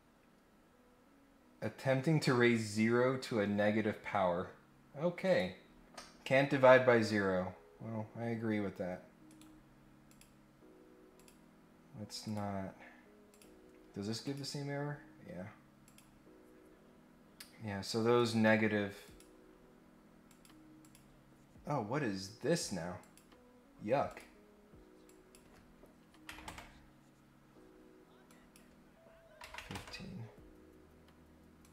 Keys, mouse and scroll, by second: 5.2 click, 6.6 scroll up 1, 8.6 scroll up 2, 9.2 right click, 10.1 click, 11.1 click, 12.2 click, 13.3 click, 14.2 click, 15.8 click, 16.6 scroll up 1, 18.1 right click, 19.0 click, 20.2 click, 20.8 click, 23.0 click, 24.0 click, 25.0 click, 28.3 click, 31.6 click.